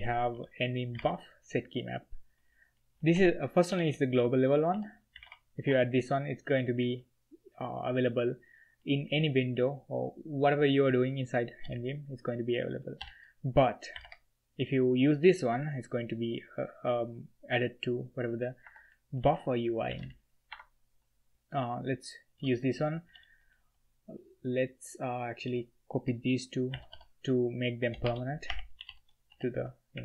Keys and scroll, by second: 0.0 j, 0.3 b, 0.9 v, 1.0 e, 2.9-5.2 typing, 3.1 Escape, 5.6 Escape, 11.6 b, 13.0-14.0 typing, 18.6 Escape, 19.1 l, 19.3 l, 19.9 v, 20.0 l, 20.5 Escape, 22.4-25.4 typing, 26.7 v, 26.9 f, 28.0-29.9 typing.